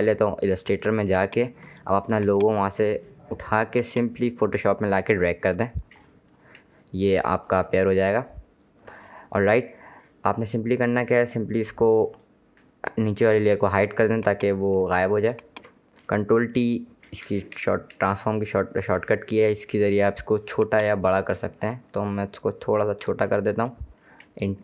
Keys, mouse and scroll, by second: 0.9 click, 1.8 space, 1.9 click, 2.3 space, 3.5 click, 13.9 click, 17.2 ctrl+t, 20.3 alt+shift+click.